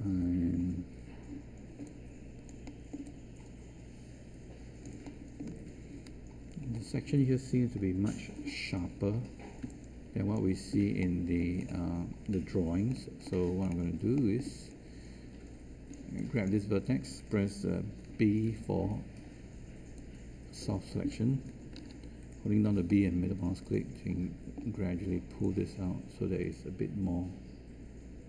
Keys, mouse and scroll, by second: 9.6 space, 18.4 b, 21.7 ctrl+z, 22.6 b.